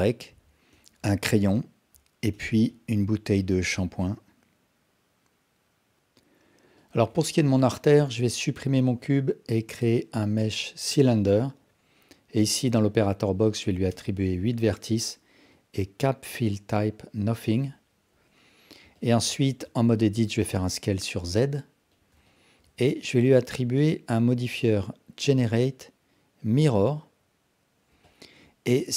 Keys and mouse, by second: 1.1 alt+click, 2.7-5.9 alt+drag, 7.7 x, 8.8 shift+a, 11.4 shift+a, 12.6-15.6 drag, 16.3-17.1 drag, 18.1 KP_1, 19.1 ctrl+alt+click, 19.4 alt+shift+click, 19.7 Tab, 20.2 s, 22.3 alt+shift+click, 23.4-27.1 drag, 28.0-28.4 alt+drag.